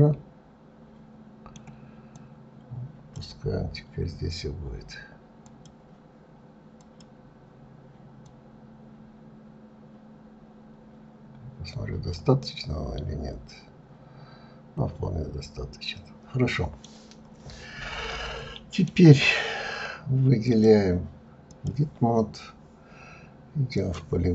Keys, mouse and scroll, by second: 2.1-5.1 drag, 5.4 click, 6.7 click, 8.2 click, 12.3-15.4 middle drag, 17.2-17.9 scroll up 6, 18.1-20.4 middle drag, 20.4-23.4 drag, 23.6 click.